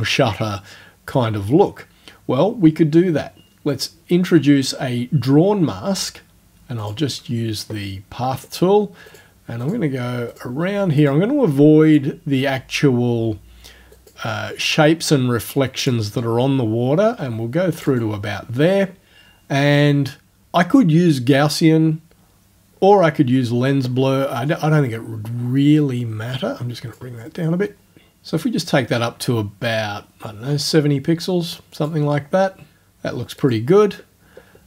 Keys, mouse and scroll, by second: 3.7 click, 6.8 click, 9.1 click, 9.6 click, 10.3 click, 11.0 click, 11.9 click, 13.9 click, 15.8 click, 17.8 click, 17.9 right click, 25.8-27.1 drag, 28.0-32.0 drag, 33.4 click.